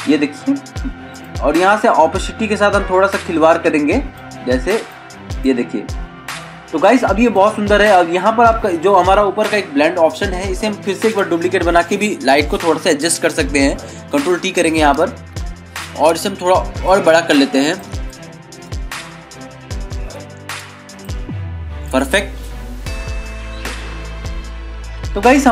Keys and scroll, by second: 11.2 ctrl+j, 14.4 ctrl+t, 15.5 ctrl+-, 25.2 ctrl+=.